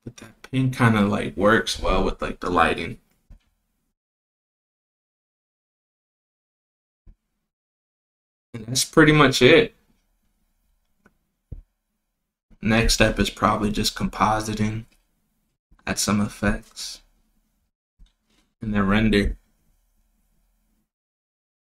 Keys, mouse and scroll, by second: 0.9 click, 3.4 click, 4.7 click, 7.5 click, 9.1 click, 10.0 click, 11.7 click, 13.3 shift+d, 16.4 click, 17.0 right click, 20.0-21.8 drag.